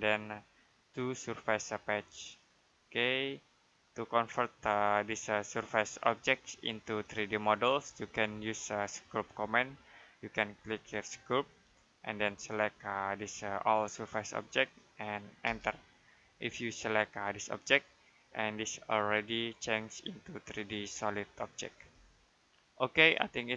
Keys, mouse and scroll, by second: 5.8 click, 7.4 Escape, 8.3 middle click, 10.9 click, 15.3 space, 17.3 click, 22.1 click.